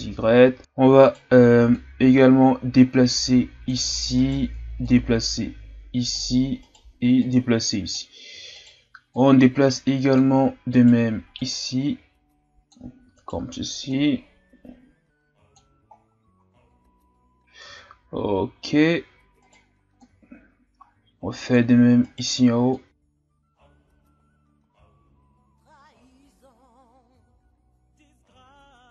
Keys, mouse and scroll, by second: 0.6-1.1 scroll up 4, 1.1 right click, 1.8-4.1 drag, 4.1 right click, 4.8-6.6 drag, 6.6 right click, 7.2-8.5 drag, 8.5 right click, 9.1-10.8 drag, 10.8 right click, 11.3-13.1 drag, 13.1 right click, 13.9-15.9 drag, 15.9-16.3 scroll down 3, 16.3 Tab, 17.2 scroll up 2, 17.6 Tab, 19.4 right click, 20.0-22.0 drag, 22.0 right click, 22.7 click, 23.9 scroll up 1, 24.0 Tab, 24.2 scroll down 2, 24.3-24.9 scroll up 2, 24.4 Tab, 24.9 middle click, 25.5 alt+right click, 25.7 middle click, 25.9 click, 26.4 KP_1, 26.5 Tab, 26.7 scroll down 3, 26.8 scroll up 2, 26.9 Tab, 27.3 right click, 27.4 middle click, 27.8 click, 28.2 right click, 28.4 click, 28.6 middle click.